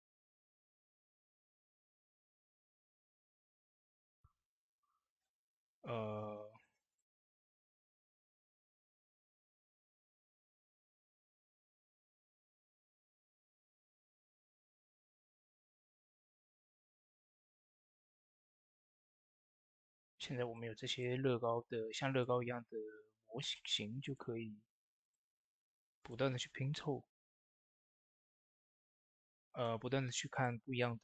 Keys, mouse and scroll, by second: 6.8 click, 6.8 typing, 8.4 Tab, 9.9 click, 10.6 shift+d, 11.4 click, 12.6 s, 13.3 click, 16.1 ctrl+z, 16.7-18.1 drag, 18.1 ctrl+a, 18.6 click, 21.4 ctrl+z, 22.1-23.9 drag, 28.5 click, 28.5 typing, 28.5 click, 29.3 middle click, 30.0 shift+click, 30.7 middle click.